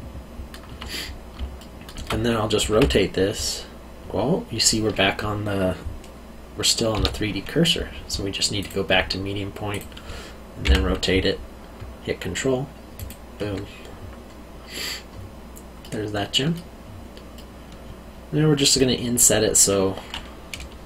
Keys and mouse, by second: 1.5 alt+middle click, 2.7 r, 6.9 Escape, 8.6 click, 10.6 r, 12.9 ctrl+click, 15.8 middle click.